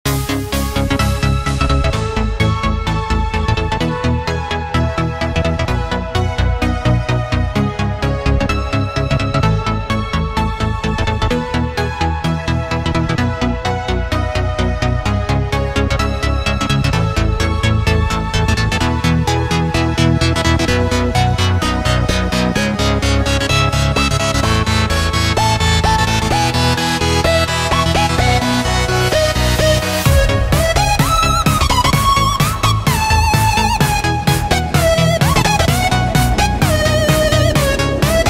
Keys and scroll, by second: 0.0 space, 0.5 alt+super+space, 0.9 alt+super+space, 1.0 alt+super+space, 1.1-1.5 alt+super+space, 4.4 space, 4.9 space, 5.6 Tab, 14.7 space, 15.2-16.0 super+space, 29.7 space, 30.2 alt+super+space, 30.3 alt+super+space, 30.4 alt+super+space, 30.5 alt+super+space, 30.7 alt+super+space, 33.6 space, 34.1 alt+super+space, 34.2 alt+super+space, 34.3 alt+super+space, 34.3 alt+super+space, 34.9 super+space, 36.0 space, 36.5 space.